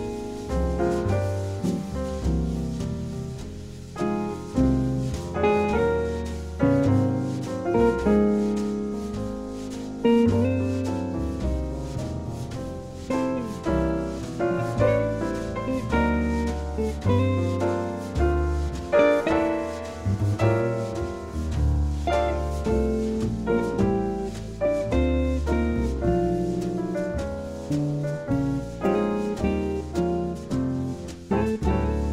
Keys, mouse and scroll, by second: 0.6-2.5 right drag, 1.8-5.1 drag, 5.9 a, 6.3 middle click, 7.5 middle click, 8.0-9.4 right drag, 12.1-14.0 drag, 17.1-19.0 drag, 24.9 g, 30.1-32.1 drag.